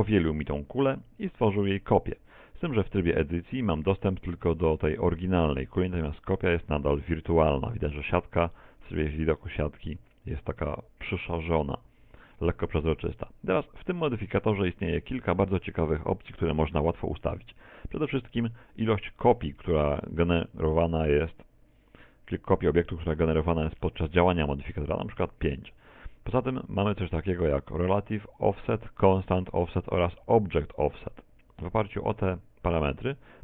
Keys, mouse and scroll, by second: 2.7 Tab, 6.7 z, 8.0 middle click, 12.0 z, 18.7 Tab, 19.0-19.5 scroll down 2, 19.7 shift+middle click, 19.7-20.3 scroll down 2, 21.2 click.